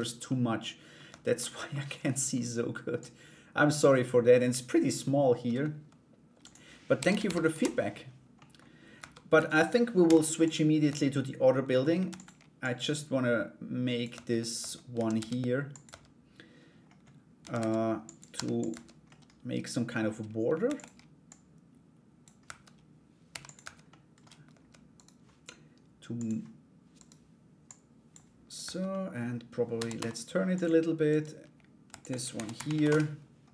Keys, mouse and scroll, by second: 0.6 Tab, 1.0 middle click, 1.6 middle click, 2.6-3.6 drag, 6.0-7.5 drag, 7.9 middle click, 8.5 Tab, 8.9 a, 9.6 u, 10.4 Tab, 11.6 shift+d, 12.2-13.6 drag, 13.7 Tab, 14.5 s, 15.4 Tab, 17.0 a, 17.1 s, 17.9 g, 18.3 Tab, 18.6 middle click, 20.2 shift+d, 20.9 click, 22.0 Tab, 22.9 g, 23.2 Tab, 23.5 middle click, 24.5 Tab, 24.5 right click, 25.7 click, 26.5 right click, 27.2-28.2 drag, 28.2 Tab, 28.5 middle click, 29.3 r, 30.7 right click, 31.5 shift+d, 31.9 r.